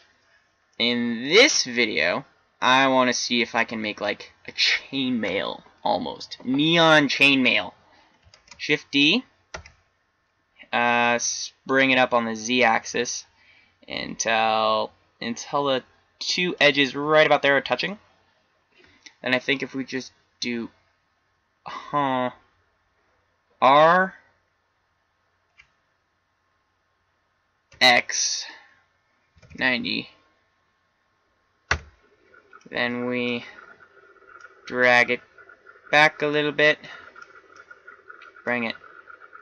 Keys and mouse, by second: 2.3-3.3 middle drag, 8.8 shift+d, 23.4 r, 32.8-34.5 middle drag, 37.1-38.0 middle drag, 38.5-39.4 drag.